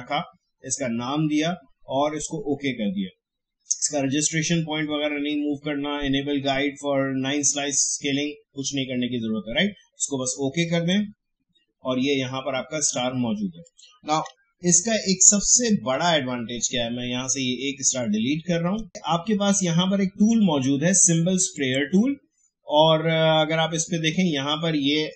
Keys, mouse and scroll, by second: 10.6 click, 13.6 click, 14.2 Delete, 15.5 click, 15.8 Delete, 16.6-18.9 drag, 21.5 click.